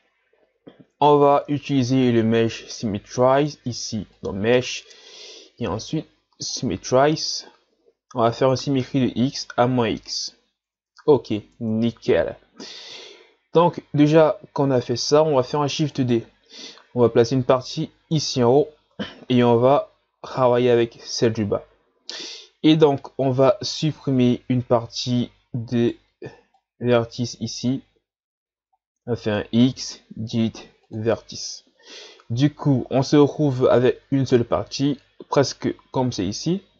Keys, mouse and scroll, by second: 1.6 a, 2.0 a, 4.2-7.1 drag, 10.7 Tab, 11.6 Tab, 13.6-14.3 scroll down 1, 14.3 scroll down 3, 14.7 shift+scroll up 4, 15.5 shift+d, 17.0-19.1 drag, 19.1 shift+scroll down 5, 19.4 scroll up 3, 24.2 z, 25.7 right click, 26.1 b, 28.5 z, 29.2-29.7 shift+scroll up 2, 29.7 x.